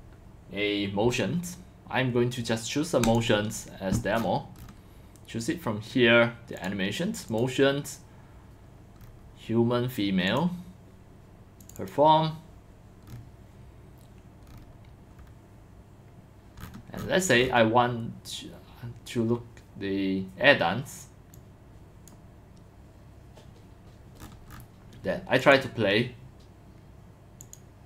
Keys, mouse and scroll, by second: 3.1 click, 6.6 click, 7.3 click, 10.3 click, 11.6 click, 11.8 click, 16.6 click, 17.0-17.5 scroll up 3, 17.9 middle drag, 21.3 click, 25.5 click, 27.1 click, 27.5 click.